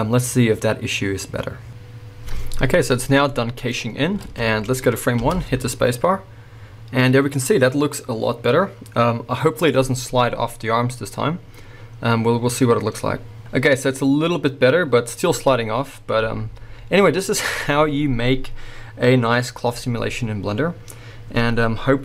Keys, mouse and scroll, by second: 3.3-22.0 middle drag, 4.2 alt+a, 5.2 space.